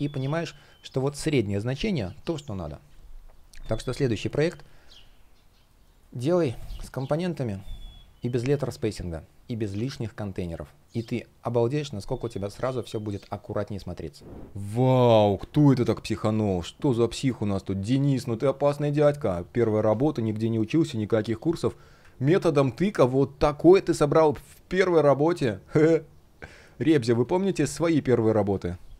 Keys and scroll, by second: 4.5 shift+g, 6.3 space, 10.5 shift+o, 12.0 space, 16.3 space, 22.5 space.